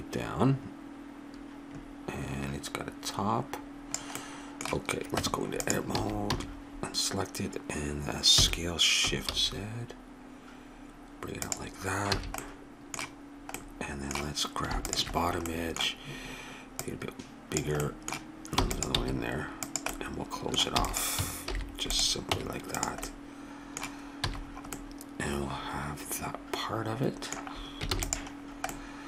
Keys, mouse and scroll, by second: 4.2-5.9 middle drag, 5.1 Tab, 5.9 a, 6.3 a, 8.4 s, 12.1 a, 14.9-16.6 drag, 16.8-17.8 drag, 17.8 middle click, 18.6 e, 18.9 s, 19.6 click, 20.7 e, 21.5 alt+m, 22.3 Tab, 23.0 middle click, 24.3 a, 27.9 ctrl+s.